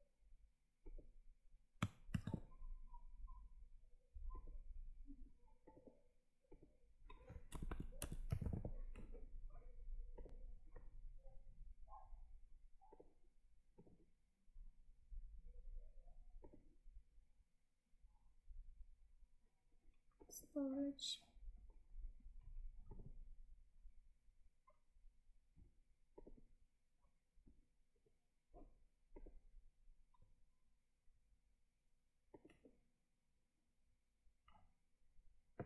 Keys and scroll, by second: 2.0 ctrl+v.